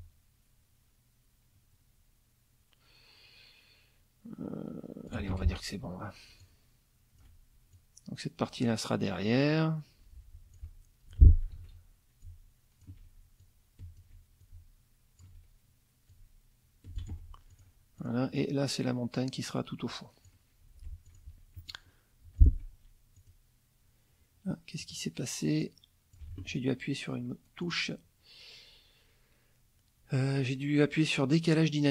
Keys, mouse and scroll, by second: 5.3 alt+F1, 6.4-7.4 shift+drag, 7.7-10.8 shift+drag, 11.1 F2, 11.6 ctrl+a, 12.2 click, 13.4 alt+click, 14.4 alt+click, 16.1 alt+click, 17.1 alt+F1, 17.5 alt+click, 18.0 alt+click, 18.4-20.4 alt+drag, 21.1 click, 21.6 click, 22.2 F2, 22.4 click, 23.2 click, 24.8 click, 25.6 click, 26.3 ctrl+z, 27.6 click.